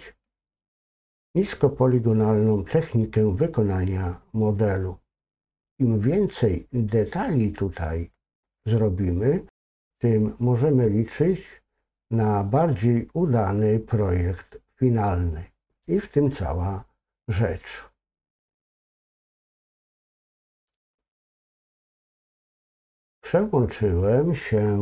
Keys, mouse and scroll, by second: 19.6 click.